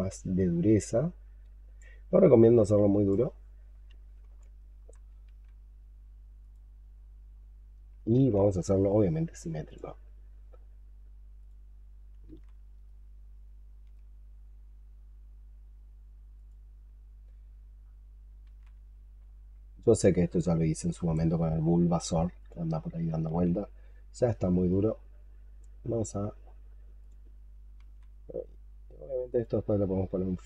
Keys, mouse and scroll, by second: 4.3 alt+click, 5.1 ctrl+z, 6.8-7.8 scroll down 13, 8.0 ctrl+z, 12.1 ctrl+z, 12.7 ctrl+right click, 17.7-18.1 scroll up 7, 18.3 ctrl+z, 29.7-30.4 scroll down 13.